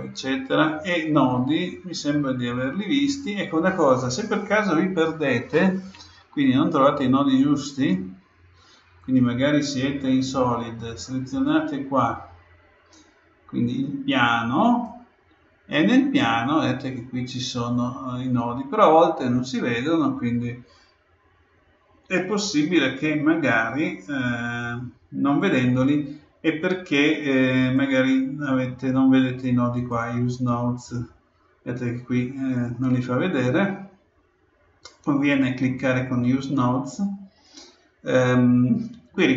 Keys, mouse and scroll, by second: 1.3-3.1 drag, 9.0-10.7 drag, 11.3-13.1 right drag, 14.6-16.4 right drag, 27.6-29.5 drag, 29.7-32.7 drag, 35.3-37.1 drag.